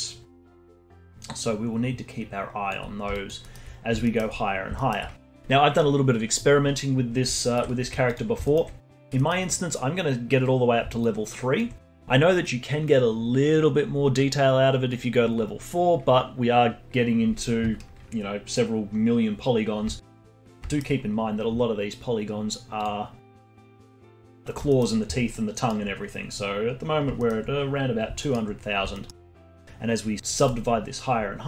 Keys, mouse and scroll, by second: 2.9 scroll down 2, 3.1 alt+click, 3.4-7.8 alt+middle drag, 7.8 z, 8.4-11.0 alt+middle drag, 11.0-14.0 alt+drag, 19.5 scroll down 2, 20.0-21.0 alt+middle drag, 21.0-22.1 scroll up 1, 22.8 click, 23.3 click, 23.5 alt+middle click, 23.9-24.7 scroll down 1, 24.7-25.9 alt+middle drag, 25.9-27.1 scroll up 1, 27.1 scroll up 1, 27.2-28.6 alt+middle drag, 28.6-28.9 scroll up 2, 28.9-30.4 alt+middle drag, 30.4-31.4 drag.